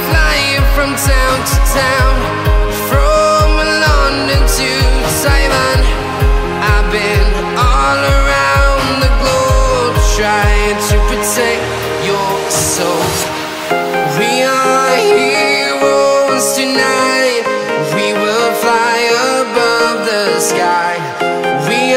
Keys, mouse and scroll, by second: 0.6 click, 2.7 click, 4.1 shift+Num_Lock, 4.1 click, 6.6 ctrl+a, 7.8 click, 7.9 right click, 8.8 click, 9.9-11.3 typing, 11.9 click, 13.6-14.8 typing, 16.6 click, 17.9 click, 19.8 click.